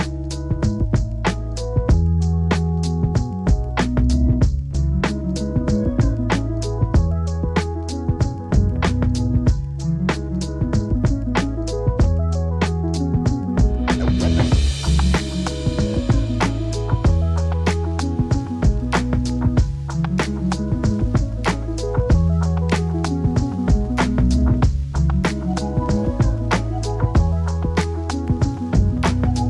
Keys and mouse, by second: 0.4-1.8 drag, 2.1 middle drag, 2.6-3.6 middle drag, 4.4 click, 4.8 ctrl+click, 5.6 ctrl+click, 6.0 click, 6.4 click, 7.0 ctrl+z, 7.1 ctrl+z, 7.2 click, 7.3 click, 7.5 click, 7.9 ctrl+z, 8.0 click, 8.2 click, 8.4 click, 8.6 click, 8.9 click, 10.8 F2, 11.0 click, 12.2 r, 12.3 g, 13.3 F4, 13.6 f, 13.8 click, 14.1 click, 14.5 click, 14.7 click, 15.2 click, 16.2 click, 16.4 click, 17.7 f, 18.1 click, 18.5 drag, 18.7 click, 19.1 F2, 19.7 g, 20.8-21.2 drag, 21.4 g, 21.8 click, 22.9 click, 23.4 s, 23.9 click, 24.7 g, 25.0-25.8 drag, 27.6 click, 28.6 click.